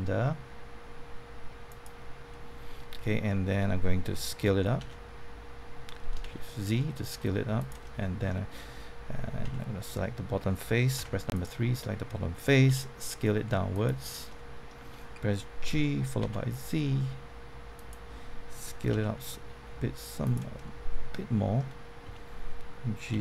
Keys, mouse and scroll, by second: 1.6 click, 2.3 middle click, 4.8 s, 6.2 shift+z, 7.5 click, 7.8-8.8 middle drag, 9.4 Tab, 10.9 3, 11.3 click, 12.6 s, 13.7 click, 14.2 middle click, 15.4-16.7 typing, 17.7-18.8 drag, 18.9 s, 20.2 click, 20.5-21.8 middle drag, 22.0 Tab, 22.8-23.2 typing.